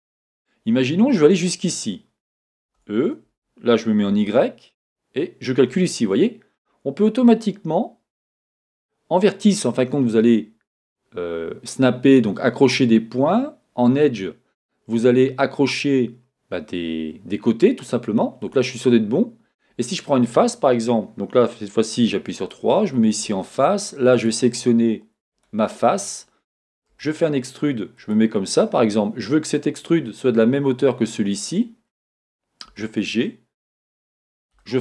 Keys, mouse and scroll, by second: 2.6 e, 18.5 click, 22.4 click, 24.1-28.1 drag, 26.9 e, 32.7 g.